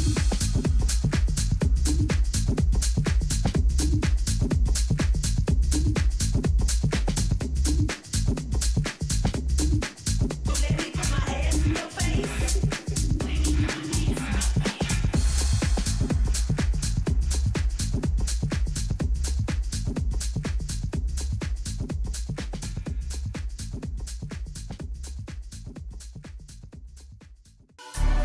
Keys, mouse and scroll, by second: 5.3-8.2 middle drag, 14.0-16.6 middle drag, 19.5-22.7 middle drag, 24.0-26.7 middle drag, 26.2-27.8 drag, 26.2 right click, 27.8 click.